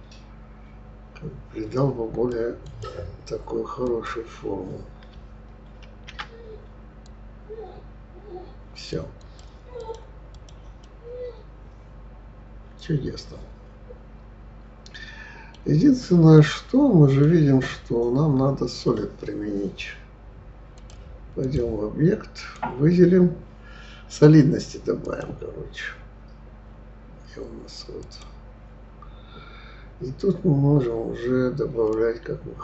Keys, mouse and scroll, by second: 3.8 click, 5.9 ctrl+r, 9.7 click, 10.3 click, 10.8-13.8 middle drag, 16.4-19.4 middle drag, 20.7-22.5 drag, 25.0-28.0 drag, 31.9-32.6 drag.